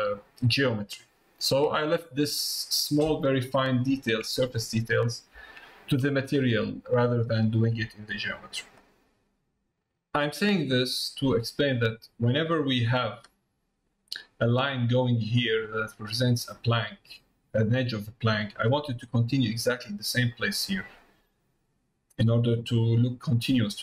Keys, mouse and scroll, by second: 1.5 middle click, 2.5 middle click, 4.5 middle click, 5.6 shift+middle click, 6.5 middle click, 7.2 middle click, 7.7 middle click, 9.0 middle click, 10.8 middle click, 12.5 middle click, 16.0 middle click, 17.2 middle click, 20.4 middle click, 21.3 middle click.